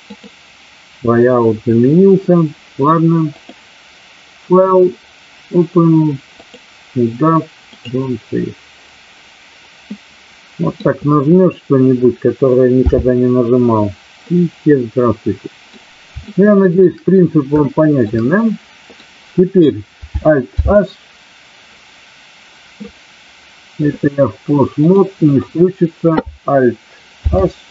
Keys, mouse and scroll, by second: 0.0 click, 3.2-8.4 drag, 10.0-10.7 middle drag, 12.7 n, 14.1-15.7 middle drag, 16.2-16.8 shift+middle drag, 17.6-18.0 shift+middle drag, 18.2-19.0 middle drag, 20.5 alt+h, 24.7-25.4 drag, 27.2 alt+h.